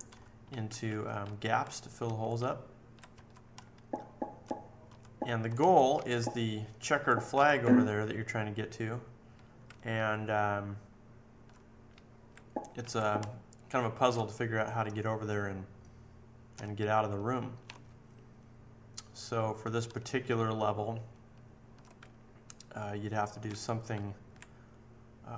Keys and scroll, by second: 0.1 Left, 0.5 Up, 0.8 Right, 1.2 Up, 2.0 Left, 2.3 Up, 2.9 Up, 3.1 Right, 3.5 Down, 4.0 Down, 4.1 Down, 4.2 Down, 4.3 Down, 4.8 Down, 5.2 Left, 5.5 Down, 5.9 Right, 6.7 Right, 7.3 Right, 9.6 Right, 10.1 Right, 10.3 Right, 10.4 Right, 10.5 Right, 10.7 Right, 10.9 Right, 11.9 Up, 12.7 Up, 13.1 Down, 13.7 Down, 13.9 Down, 14.1 Down, 14.1 Left, 14.5 Left, 14.7 Left, 14.8 Left, 14.9 Left, 14.9 Left, 15.1 Left, 15.3 Left, 16.5-17.2 Down, 17.3 Down, 17.4 Down, 17.5 Down, 17.6 Down, 17.6-18.5 Right, 18.6 Right, 18.7 Right, 18.8-22.7 Right, 21.9 Up, 22.5-23.3 Up, 23.5 Left, 23.9 Up.